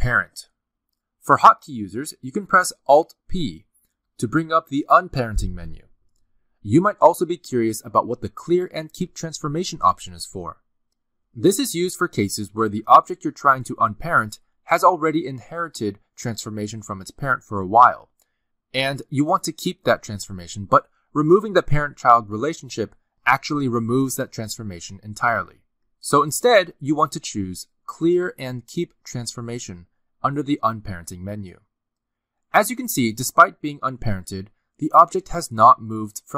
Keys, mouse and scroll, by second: 3.7 alt+p, 13.3 ctrl+z, 14.1 click, 14.4 g, 17.7 g, 18.2 r, 18.7 r, 19.9-23.0 typing, 24.3 click, 27.6 right click.